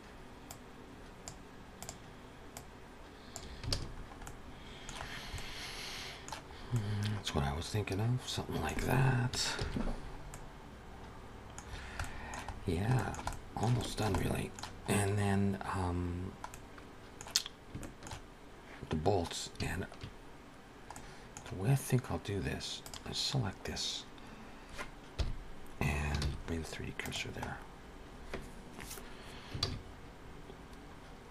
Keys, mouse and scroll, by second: 0.3 click, 1.7 click, 2.7 click, 3.5 alt+a, 3.7-4.1 scroll down 4, 4.1 middle click, 4.9 scroll down 2, 5.2 middle click, 6.3 scroll up 3, 6.5 middle click, 9.4 ctrl+s, 9.8-10.2 scroll up 4, 10.1 middle click, 11.5-11.8 scroll down 5, 11.8 middle click, 12.3 scroll down 2, 12.8 shift+middle click, 13.1 middle click, 13.6 shift+middle click, 13.9 middle click, 14.8-15.1 scroll up 1, 15.9 scroll down 1, 16.3 middle click, 17.6 shift+middle click, 20.8 middle click, 22.6 click, 24.9 KP_1, 26.1 shift+s, 27.3 scroll up 2, 29.9 shift+a.